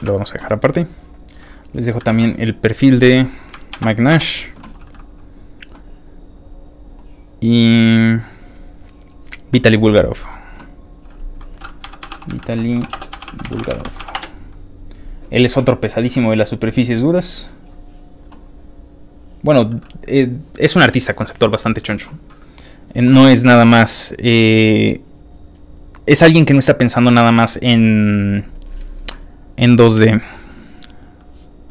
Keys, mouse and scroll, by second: 0.0 ctrl+w, 0.7 scroll down 2, 1.8 click, 2.8 ctrl+c, 2.8 ctrl+click, 4.1 v, 4.2 Return, 4.9 ctrl+middle click, 5.0-7.0 scroll down 4, 7.6 ctrl+middle click, 9.1 ctrl+click, 10.1 click, 11.0 click, 11.6-14.3 typing, 17.6 click, 19.2 click, 22.4 scroll down 2, 23.1-23.5 scroll down 2, 24.2-25.1 scroll down 1, 27.5 click.